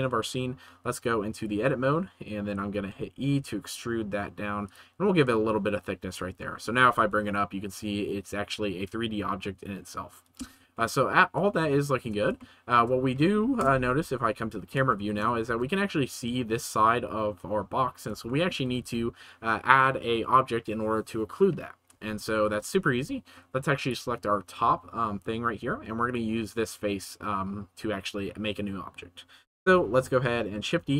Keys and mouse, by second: 0.8 Tab, 1.4-2.7 drag, 2.7 e, 4.6 right click, 5.1 middle click, 6.0 Tab, 6.3-6.7 middle drag, 6.8 g, 6.8 z, 10.8-11.1 middle drag, 11.5-12.0 shift+middle drag, 12.4-12.8 shift+middle drag, 13.5 KP_0, 14.8-15.1 shift+middle drag, 15.4 ctrl+s, 18.2 shift+middle click, 18.4 shift+click, 18.4 shift+c, 18.8 ctrl+s, 25.6 Tab, 26.0 click, 30.7 shift+d.